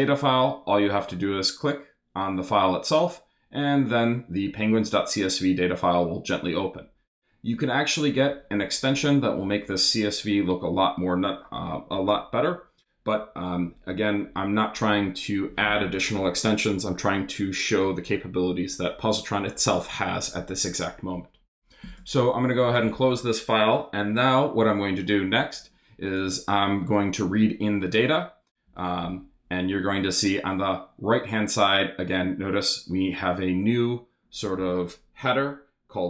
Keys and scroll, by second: 27.1 Up, 27.7 super+Up, 28.6 super+Return.